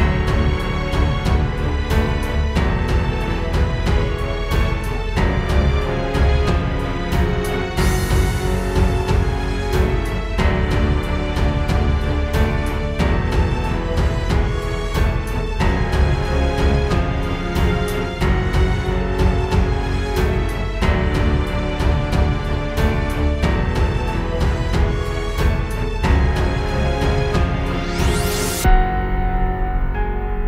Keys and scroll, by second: 5.8 space, 7.8 space, 13.4 space, 13.9 alt+super+space, 14.7 super+space, 19.7 space, 19.9 space, 23.8 super+z, 24.8 space, 25.4 super+space.